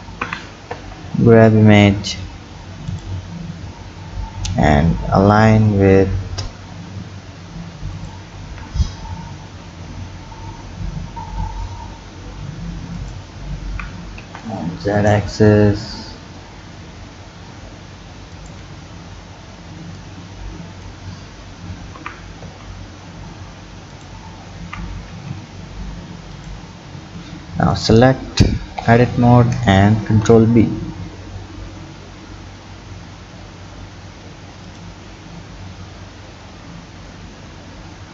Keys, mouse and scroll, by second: 0.2 g, 3.4 s, 8.5 g, 13.7 g, 18.9-20.0 scroll up 3, 20.0-21.1 drag, 21.1-21.6 scroll up 5, 22.0 g, 24.6 g, 27.7 click, 28.8 Tab, 30.0 ctrl+b, 35.1-35.7 scroll down 6, 36.3-37.1 scroll up 6.